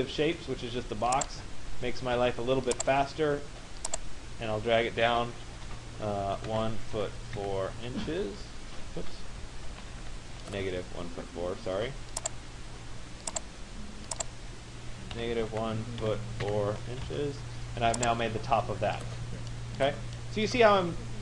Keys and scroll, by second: 6.1 1, 7.4 4, 8.1 Return, 9.9 ctrl+z, 15.5 1, 16.5 4, 18.6 Return.